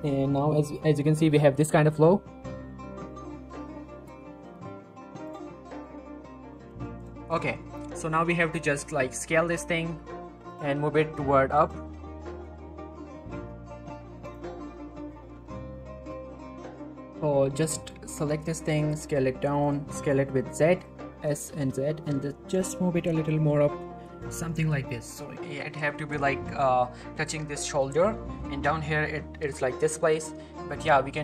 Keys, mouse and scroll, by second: 1.8-2.8 scroll up 1, 5.5 click, 9.0 s, 10.5 click, 10.6 g, 10.9 z, 11.6 click, 11.9-12.4 shift+middle click, 12.5-13.0 shift+scroll up 2, 13.0 s, 14.2 click, 16.1 click, 17.4 click, 17.5 shift+middle click, 17.8 click, 18.1-18.4 scroll up 1, 18.4 z, 18.9 s, 19.8 s, 19.9 z, 20.8 click, 21.1 g, 21.5 z, 24.2 click, 24.5-24.9 typing, 25.3-25.7 shift+scroll up 2, 28.0 shift+middle click, 28.3 scroll down 1, 30.3 Tab.